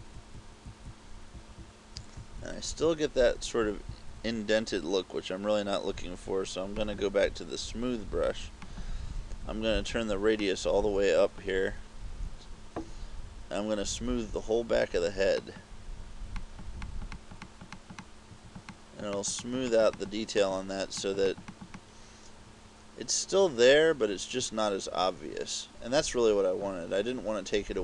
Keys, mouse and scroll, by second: 0.0-2.4 typing, 6.9 click, 10.5 click, 12.2 scroll down 1, 15.4 click, 16.5 click, 16.9 click, 17.2 click, 17.5 click, 18.0 click, 18.2 click, 18.8 click, 19.2 click, 19.5 click, 19.8 click, 20.1 click, 20.4 click, 21.1 click, 21.4 click, 21.6 click, 21.8 click.